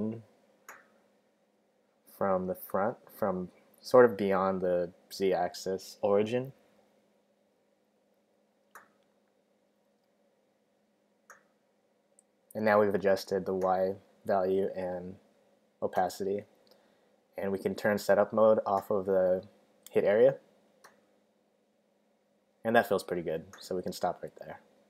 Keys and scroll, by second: 6.2 super+z.